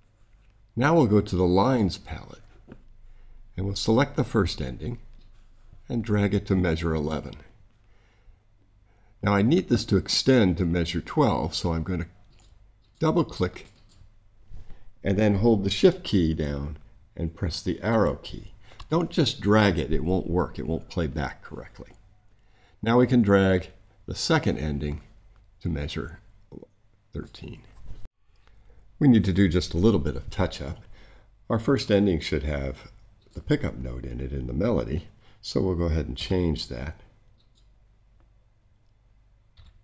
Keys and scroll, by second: 17.8 shift+Right, 36.1 6, 39.5 5.